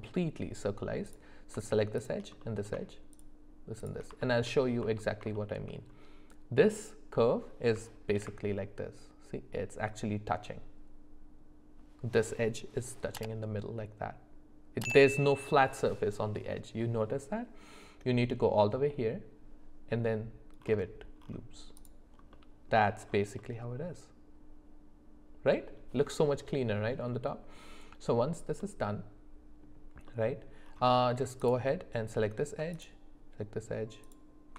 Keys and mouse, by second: 2.0 shift+click, 2.4 middle click, 3.1 shift+click, 3.8 shift+click, 4.5 alt+middle click, 5.3 shift+middle click, 8.1 ctrl+b, 22.3 middle click, 23.4-25.7 middle drag, 28.6-29.6 middle drag, 30.1 middle click, 31.4 alt+click, 32.7 alt+shift+click, 34.0 alt+shift+click.